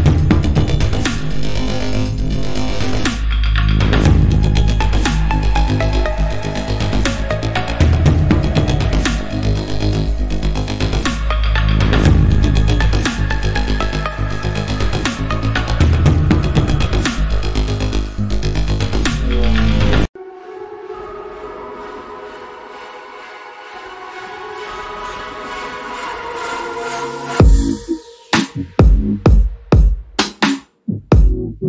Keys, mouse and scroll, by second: 4.5 click, 4.9 i, 5.8 click, 6.0 a, 8.1 click, 8.4 i, 9.3 click, 9.7 a, 10.0 click, 12.8 click, 13.9 i, 15.1 click, 15.4 a, 15.7 click, 26.1 alt+Num_Lock, 26.4 alt+scroll up 1, 27.9 click, 31.0 click.